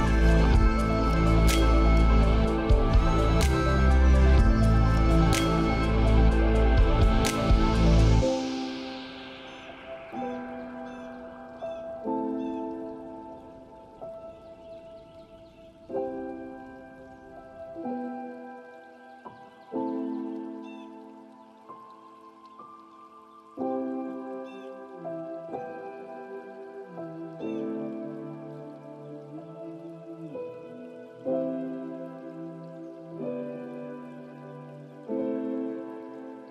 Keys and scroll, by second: 12.9 ctrl+a, 34.2 ctrl+space.